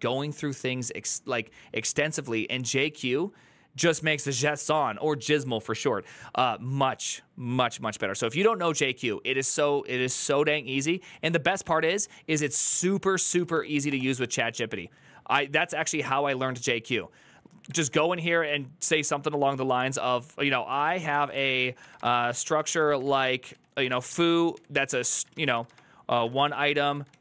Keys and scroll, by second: 10.5 ctrl+c, 10.7 ctrl+c, 10.9 ctrl+c, 12.2 alt++, 12.5 ctrl+t, 12.8-13.8 typing, 17.6 alt+f, 20.3-27.2 typing.